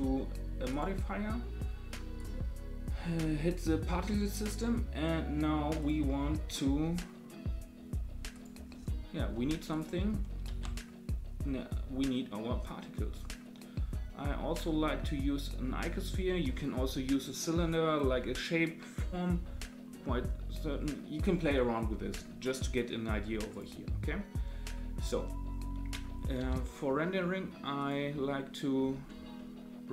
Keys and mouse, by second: 0.7-2.2 drag, 10.4 shift+a, 26.4 g, 28.2-28.6 middle drag, 28.6 click, 29.3-29.9 middle drag.